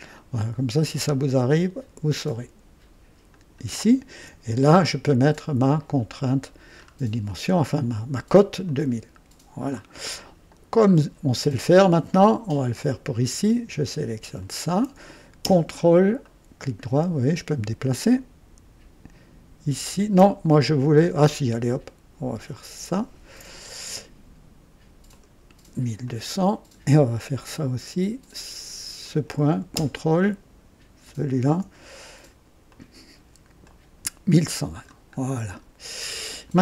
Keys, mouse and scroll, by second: 0.1 ctrl+right click, 3.3 ctrl+click, 5.6 click, 6.3-7.0 scroll down 2, 7.2 right click, 8.6-9.8 drag, 10.1 right click, 10.8-11.7 scroll up 2, 12.1-12.6 right drag, 12.7 scroll up 1, 14.3 click, 16.2-17.6 ctrl+right drag, 22.8 ctrl+click, 25.0 click, 26.0-26.9 drag, 28.9 click, 31.0 ctrl+click, 32.6 click, 33.6-35.0 drag, 35.1-35.6 scroll down 1, 35.9-36.6 right drag.